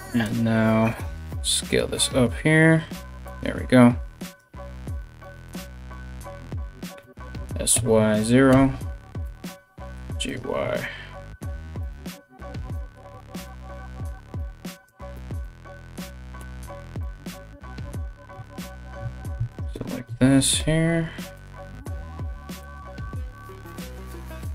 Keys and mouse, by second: 3.8 click, 4.0-5.0 middle drag, 4.8 2, 5.0 click, 5.2 ctrl+middle click, 5.5 ctrl+click, 5.8-11.4 middle drag, 6.6 s, 8.8 g, 10.7 1, 11.4 right click, 11.5-13.1 middle drag, 13.1 right click, 13.2-14.5 middle drag, 14.5 shift+right click, 14.6-24.5 shift+middle drag, 15.0 KP_3, 16.0 g, 17.9 3, 18.0 right click, 19.1 shift+right click, 19.6 Return, 19.6 KP_3, 20.2 g, 21.4 r.